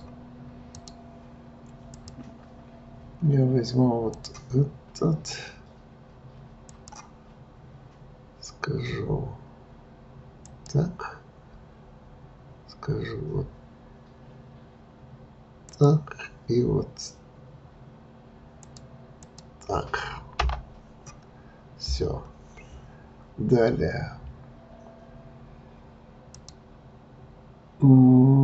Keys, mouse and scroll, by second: 4.1-7.1 drag, 26.2-28.4 drag.